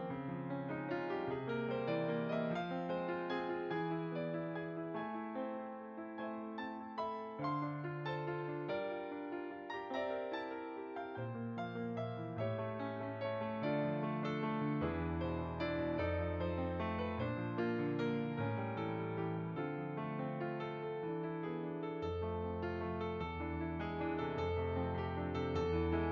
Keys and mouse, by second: 2.1 shift+a, 4.3 click, 5.4 s, 6.0 click, 6.6 z, 8.3 g, 8.7 x, 9.3 click, 11.3 s, 11.6 x, 12.4 click, 12.6 middle click, 13.8 s, 14.8 click, 19.8 click, 23.0 g, 24.0 Tab, 25.0 click.